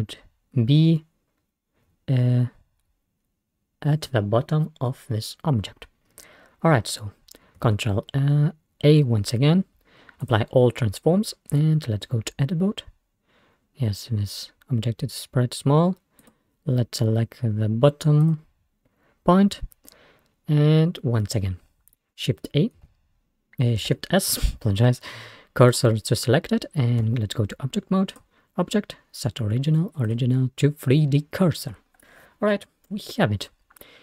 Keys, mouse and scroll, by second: 7.7 ctrl+a, 11.6 Tab, 12.1-12.5 scroll up 1, 12.5 scroll down 1, 16.2 click, 18.3 click, 22.8 shift+a, 23.9 shift+s, 27.1 Tab, 28.2-30.9 drag, 31.2-33.8 scroll down 1, 33.8 scroll down 1.